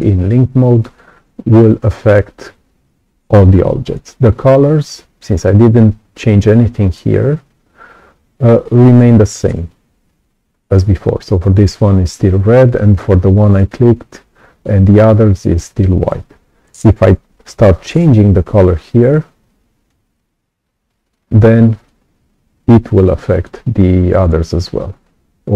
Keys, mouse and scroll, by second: 20.1 click, 21.8-23.4 drag.